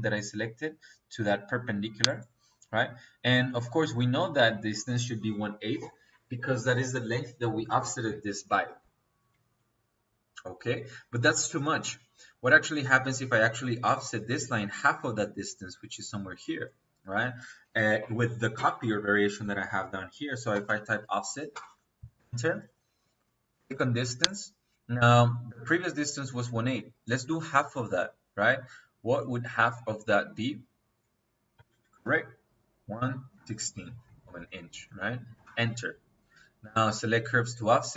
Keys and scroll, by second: 17.2 Escape, 19.3 Escape, 20.5 o, 20.7 f, 21.4 Return, 31.4 KP_1, 31.8 KP_Divide, 32.8 KP_1, 33.2 KP_6, 35.2 Return.